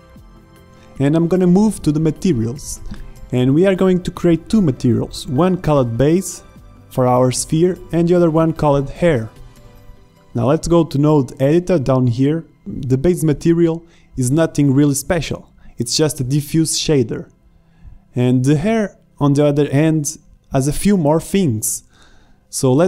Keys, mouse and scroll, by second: 2.6-6.2 drag, 4.1 BackSpace, 4.2 BackSpace, 7.2 middle click, 8.1-9.8 drag, 10.1 click, 10.4 click, 12.8-14.7 middle drag, 14.7 click, 17.7 scroll down 1.